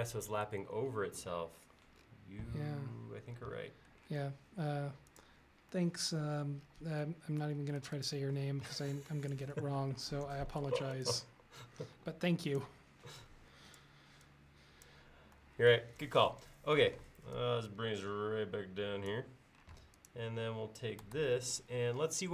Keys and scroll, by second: 4.3 space, 12.0 e, 17.0 p, 19.8 space, 21.2 super+s.